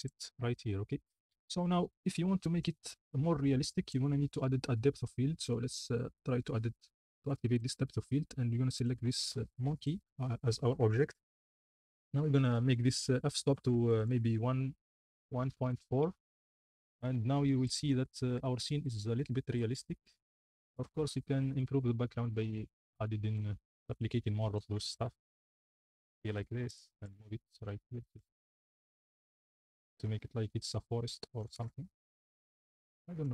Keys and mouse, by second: 2.4 middle click, 2.9 shift+middle drag, 3.8 click, 7.5 click, 8.8 click, 12.7-16.3 drag, 23.7 alt+d, 24.1-26.0 typing, 27.2-28.8 typing, 31.5 s, 31.8 x, 33.1-33.3 typing.